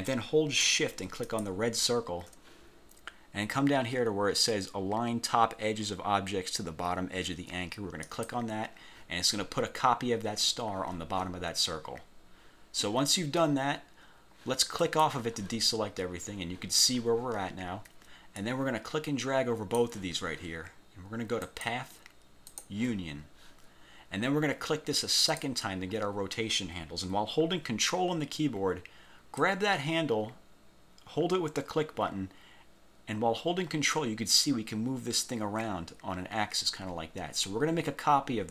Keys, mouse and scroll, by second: 1.3 shift+click, 8.1 click, 14.9 click, 18.5-20.1 drag, 21.6 click, 22.7 click, 25.3 click, 29.5-38.5 ctrl+drag.